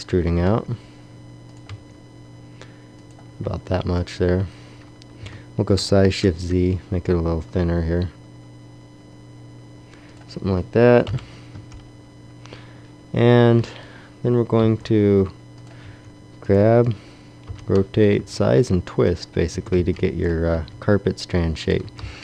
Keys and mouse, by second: 0.3 e, 1.7 e, 3.8 Tab, 5.1 s, 10.9 KP_1, 11.4 Tab, 13.4 z, 14.5 g, 15.7 r, 17.4 o, 18.1 s, 19.1 click, 19.6 a, 20.4 b, 20.8 g, 21.5 click.